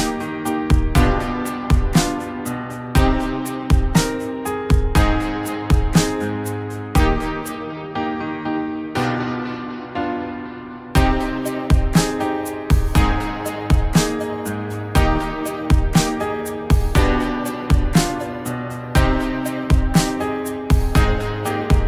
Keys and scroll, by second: 18.2 3.